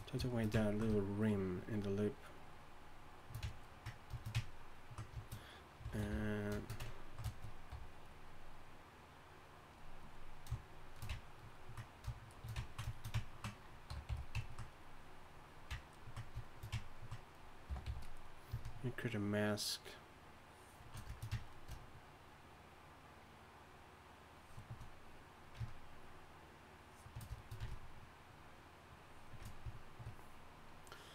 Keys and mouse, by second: 0.0-4.6 drag, 5.9 shift+c, 6.1 f, 7.7 f, 8.5-11.4 drag, 13.9 y, 14.1 f, 14.7-15.9 drag, 17.7 g, 17.8 f, 18.2-20.7 drag, 22.1-24.6 drag, 26.0-31.1 drag.